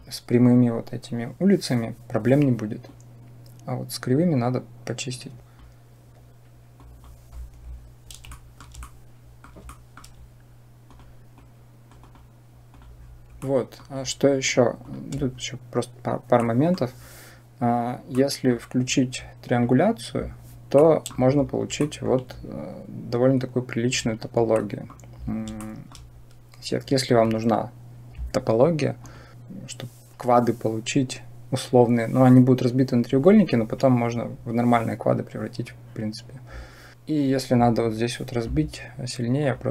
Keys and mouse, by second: 2.8-5.5 drag, 5.4 Delete, 6.8 click, 8.3 shift+middle click, 8.7 middle click, 9.6 shift+middle click, 10.7-12.0 drag, 13.3-13.6 middle drag, 14.7 click, 16.2 click, 16.3 middle click, 16.4 click, 18.0 click, 18.1 middle click, 19.4 click, 20.7 middle click, 21.6 shift+middle drag, 24.5 middle drag, 25.6 shift+middle click, 28.8-29.3 drag, 39.3 click.